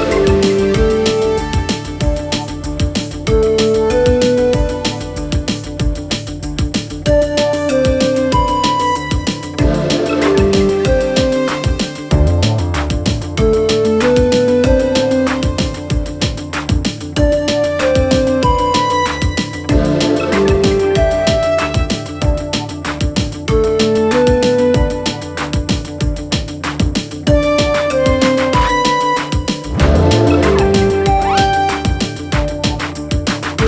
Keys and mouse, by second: 0.3 shift+middle drag, 1.9 ctrl+a, 4.7 shift+middle drag, 5.8-7.4 drag, 13.0-14.5 middle drag, 17.3 click, 18.8-19.8 middle drag, 21.1 shift+middle drag, 23.2 shift+middle click, 23.6-25.7 middle drag, 25.9 shift+middle click, 27.3 shift+middle drag, 27.7-28.3 middle drag, 29.9 Tab.